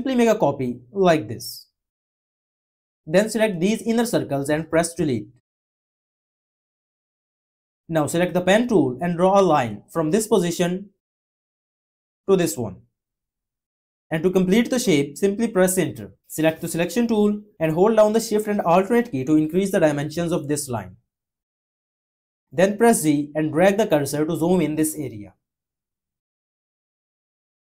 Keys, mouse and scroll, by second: 18.4-22.1 alt+shift+drag, 22.5 z.